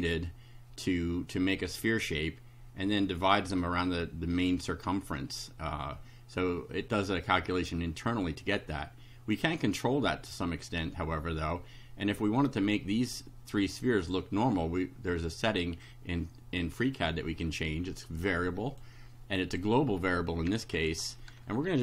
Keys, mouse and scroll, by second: 18.0 click, 19.5 click.